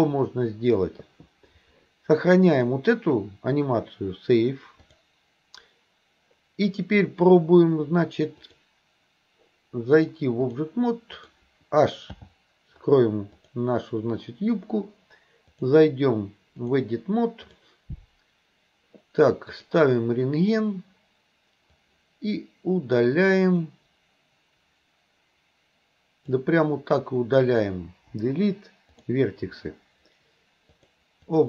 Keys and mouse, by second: 2.5-5.1 drag, 8.4 click, 10.0 click, 11.2 click, 12.2 h, 13.4 click, 15.6-16.9 drag, 17.5 click, 19.7 click, 21.8 click, 22.1-26.4 drag, 28.1 Delete, 30.8 click.